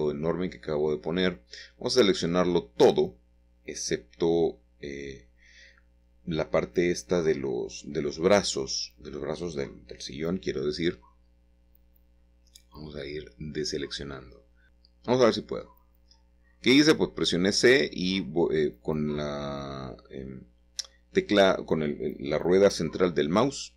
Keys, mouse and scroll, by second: 1.3 ctrl+z, 3.0 Tab, 4.5 ctrl+z, 5.0 ctrl+z, 5.4 ctrl+z, 9.1 a, 14.3 ctrl+l, 14.7 ctrl+l, 15.9-16.6 scroll up 1, 16.6-17.9 shift+middle drag, 19.0 c, 19.9-23.6 middle drag.